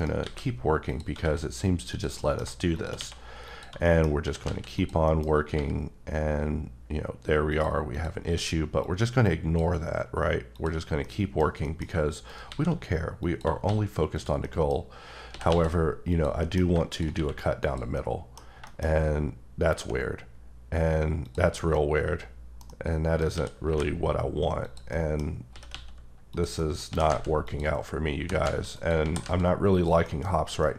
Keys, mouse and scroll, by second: 0.0 shift+right click, 0.2 shift+a, 0.9 click, 1.2 s, 1.9 click, 2.2 middle click, 2.7 click, 2.9 q, 3.5 click, 3.8 middle click, 4.2 s, 4.4 z, 4.7 click, 5.2 middle click, 5.2 scroll up 2, 5.5 g, 7.5 click, 7.9 click, 8.2 q, 10.5 click, 10.8 scroll, 11.0 middle click, 11.6 middle click, 12.3 shift+right click, 12.5 shift+a, 13.2 click, 13.6 s, 14.1 click, 14.4 middle click, 14.7-15.3 scroll down 2, 15.3 s, 15.5 x, 16.1 click, 16.4 middle click, 16.9 shift+click, 17.1 q, 17.6 click, 17.9 middle click, 18.8 shift+scroll up 1, 19.4 scroll up 1, 19.7 g, 21.5 scroll down 1, 21.7 middle click, 22.7 double middle click, 23.3 s, 23.7 y, 24.6 click, 24.9 middle click, 25.2 scroll down 1, 25.5 s, 25.7 x, 26.3 click, 26.6 middle click, 26.9 s, 27.1 z, 27.5 click, 27.8-28.2 scroll down 3, 28.2 g, 28.4 z, 28.7 click, 29.0 s, 29.2 z, 29.7 click, 30.0 middle click, 30.3-30.6 scroll up 2, 30.6 middle click.